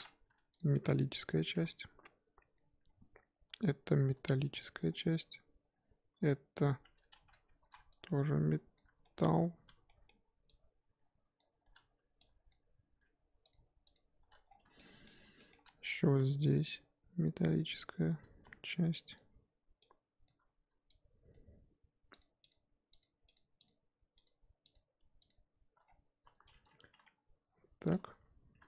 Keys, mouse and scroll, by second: 0.6 click, 1.5 l, 2.4-4.1 scroll down 1, 4.1 l, 4.8-6.1 scroll down 2, 6.1 scroll down 1, 6.1 l, 7.1 ctrl+z, 7.7 z, 8.7 shift+Left, 9.0 shift+middle drag, 9.2-9.8 scroll up 7, 9.8-11.4 shift+middle drag, 11.4 shift+Left, 13.9 shift+click, 14.4 scroll down 4, 14.8-15.5 shift+middle drag, 15.5-18.1 shift+scroll up 4, 18.1 shift+click, 19.1 shift+click, 20.2 shift+click, 20.4-21.3 scroll up 2, 21.3 shift+click, 22.2 shift+click, 23.0 shift+click, 24.2 shift+click, 24.7 shift+click, 25.9-26.8 scroll down 4, 26.8 g, 28.2 z, 28.6 Tab.